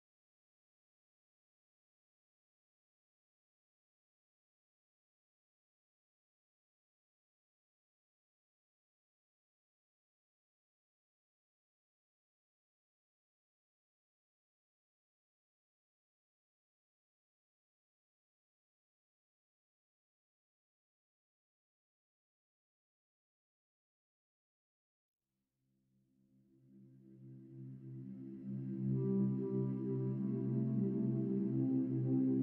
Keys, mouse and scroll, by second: 10.2-11.4 middle drag, 11.4 n, 12.2 s, 14.0 KP_Decimal, 14.5-15.2 middle drag, 15.2 scroll down 2, 15.8 click, 18.3 click, 21.6-23.1 middle drag, 23.4-26.3 middle drag, 26.3 s, 27.6 s, 30.3 scroll down 4, 30.5-31.5 middle drag, 31.5 click.